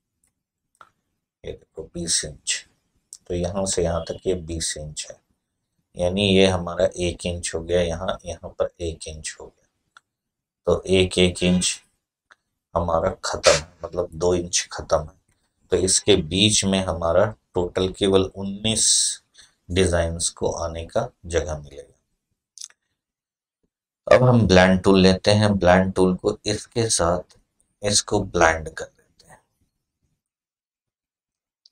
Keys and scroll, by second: 15.1 Delete.